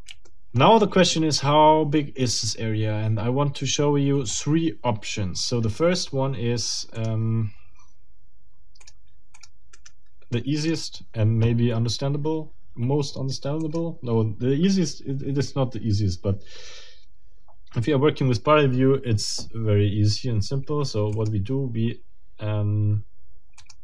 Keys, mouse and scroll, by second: 0.2 shift+middle click, 7.0 click, 8.8 click, 9.4 click, 9.7 right click, 10.6 click, 13.6 click, 21.1 click, 23.6 click.